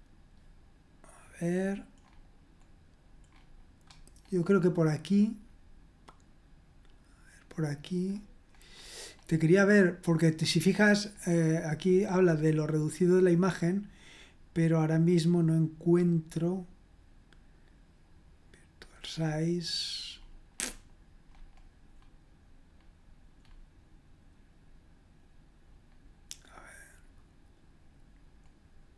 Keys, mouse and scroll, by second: 1.5-2.9 scroll up 1, 3.3-5.1 scroll up 1, 5.4-6.3 scroll up 1, 6.6-7.0 scroll up 1, 7.0-8.0 scroll down 1, 8.0-8.7 scroll down 1, 8.7-10.1 scroll up 2, 11.1-11.9 scroll down 2, 11.9 scroll up 2, 12.2-12.8 scroll down 2, 15.5-17.0 scroll down 3, 17.0-17.9 scroll up 2, 18.8 click, 19.4-20.1 scroll down 2, 20.1-22.7 scroll up 2, 22.7-24.3 scroll up 1, 24.3-25.2 scroll down 2, 25.2-25.8 scroll down 1, 25.8 scroll down 1, 27.6-28.9 scroll down 2.